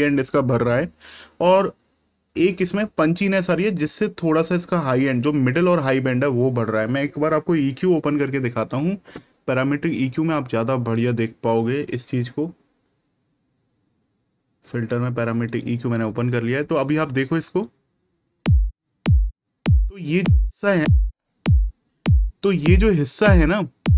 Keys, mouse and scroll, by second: 8.6 click, 15.4 click.